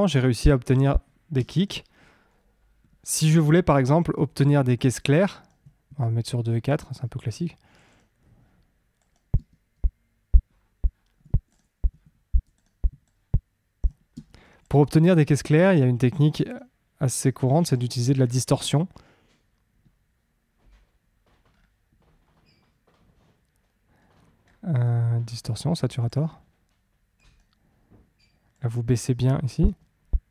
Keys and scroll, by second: 1.3 space, 9.3 space, 14.1 space, 29.6 space.